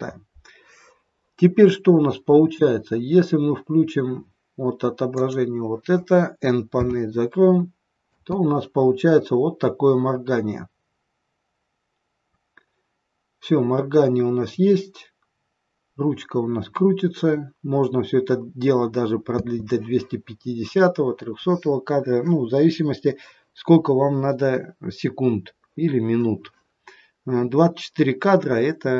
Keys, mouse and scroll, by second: 5.2 click, 6.7 n, 8.0 space, 19.4 space.